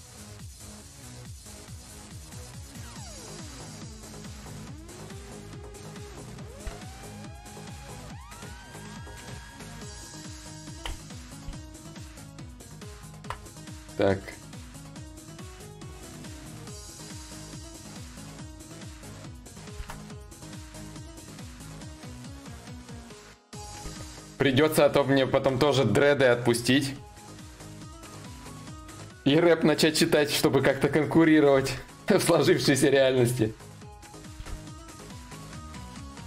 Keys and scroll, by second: 10.4 ctrl+z, 11.5 ctrl+z, 11.9 ctrl+z, 12.3 ctrl+z, 19.4 ctrl+z, 33.9 ctrl+z.